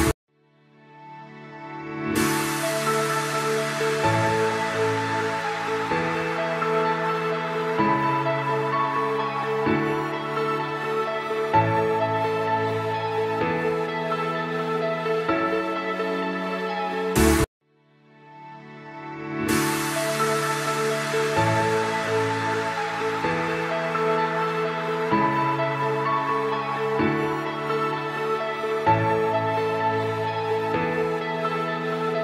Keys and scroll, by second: 1.4 space, 1.8 F3, 5.0 F2, 7.9-8.7 typing, 11.0-11.9 typing, 13.5 e, 14.8 Escape, 15.3 F3, 15.9 F2, 22.2 ctrl+g, 22.8 c, 23.3 F3, 26.6 F3, 27.4 F2, 31.4 F2.